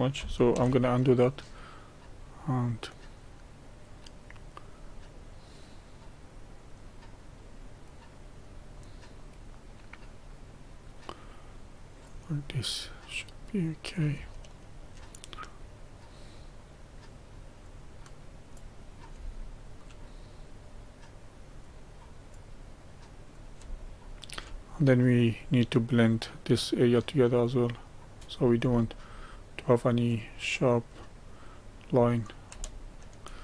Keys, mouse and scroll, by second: 0.3 scroll up 1, 0.6 ctrl+z, 2.4-12.2 drag, 12.2-12.8 scroll down 1, 12.8-13.1 scroll down 1, 13.1-14.4 drag, 14.4 shift+middle click, 15.3-19.3 drag, 19.3-20.3 shift+middle drag, 20.3-23.7 drag, 23.7-25.0 shift+middle drag, 25.0-29.1 drag, 29.1-30.2 shift+middle drag, 30.2-30.9 scroll up 1, 30.9-32.0 middle drag, 32.0-32.6 scroll down 1, 32.6-33.4 shift+middle drag.